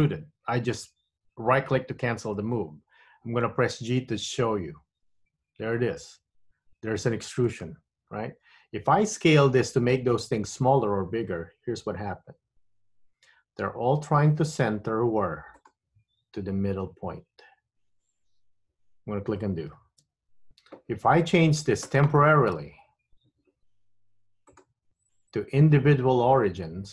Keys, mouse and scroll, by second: 5.1 g, 12.6 s, 19.9 super+z, 24.6 click.